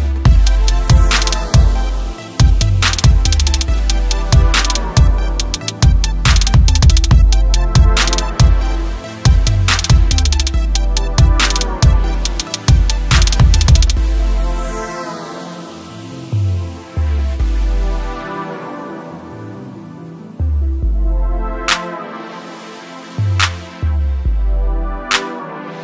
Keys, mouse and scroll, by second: 0.0-2.4 typing, 1.1 click, 2.6 click, 4.5 space, 7.9 space, 10.1 space, 10.5 click, 13.1 s, 13.3 click, 14.5 click, 17.7 click, 18.3-21.6 typing, 20.4 click, 21.3 click, 25.3 space.